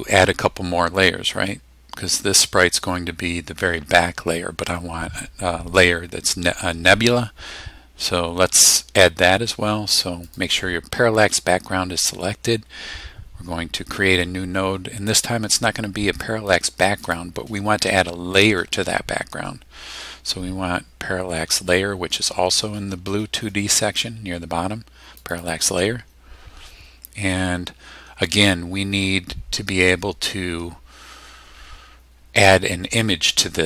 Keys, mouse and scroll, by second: 10.2 click, 17.0 click, 19.4-19.7 scroll down 1, 20.5-20.8 scroll down 2, 25.2 click.